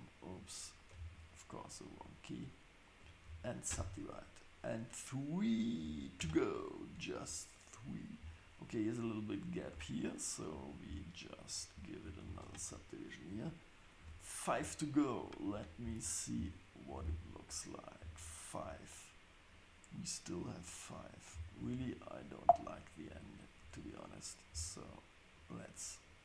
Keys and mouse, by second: 0.5 click, 3.3 ctrl+shift+s, 6.2 Tab, 9.7 Tab, 10.7 click, 11.4 shift+click, 12.2 ctrl+shift+s, 14.0 Tab, 23.2 click, 23.6 Tab, 25.3-26.2 drag.